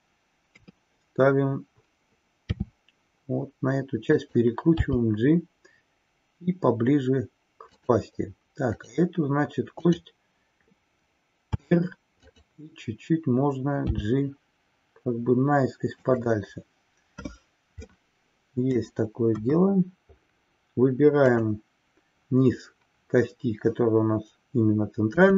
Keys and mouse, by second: 0.4 KP_3, 2.4 r, 8.6 click, 9.8 click, 17.8-19.0 middle drag, 19.4 KP_1.